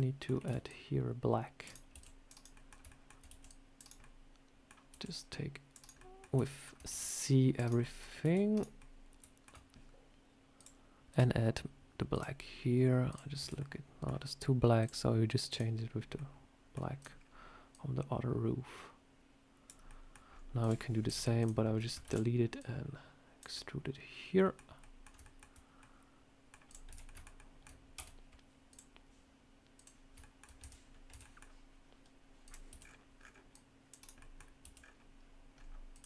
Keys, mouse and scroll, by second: 0.3 c, 1.8 c, 2.4 middle click, 2.8 shift+middle click, 3.2 c, 3.9 middle click, 4.8 c, 5.9 middle click, 6.3 shift+middle click, 6.8 c, 7.7 middle click, 8.1 c, 8.7 middle click, 10.5 click, 11.0 click, 13.0 click, 13.3 Tab, 13.5 middle click, 14.7 click, 16.0 middle click, 16.9 click, 17.0 scroll down 2, 17.6 click, 19.8 middle click, 20.2 scroll up 2, 20.5 click, 21.0 Delete, 21.3 click, 21.9 shift+d, 22.5 click, 23.4 middle click, 24.7 middle click, 25.1 shift+middle click, 25.3 shift+middle click, 25.7 middle click, 26.6 click, 26.8 Tab, 26.9 scroll up 1, 26.9 middle click, 27.2 shift+middle click, 27.8 a, 28.6 click, 30.1 shift+middle click, 30.5 Tab, 30.8 scroll up 1, 31.0 Tab, 31.1 middle click, 32.3 click, 32.6 c, 34.1 middle click, 34.5 c.